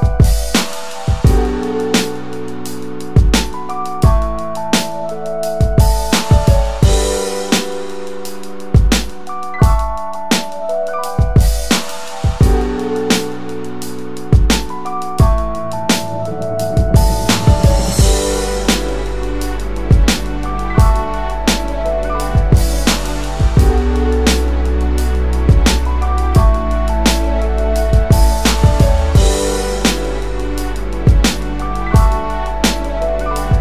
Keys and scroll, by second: 18.8 shift+space, 31.0 ctrl+0, 32.1-32.4 ctrl+space.